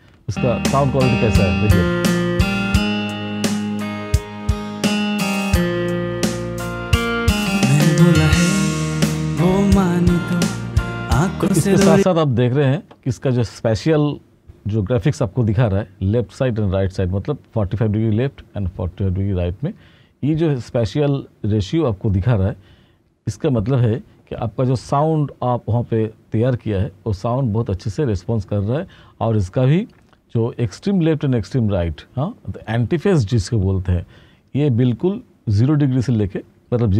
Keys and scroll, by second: 3.8 typing, 5.4-9.2 typing, 11.3 space, 16.7-18.6 typing, 21.5-22.9 typing, 31.4-35.1 typing.